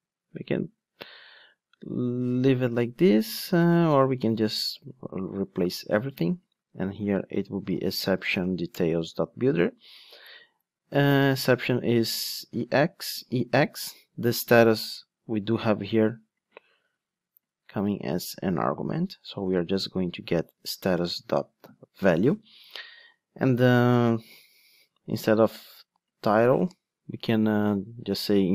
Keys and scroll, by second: 5.4 super+v, 8.7 Return, 11.3 Return, 11.4 super+c, 12.4 super+v, 20.6 Return.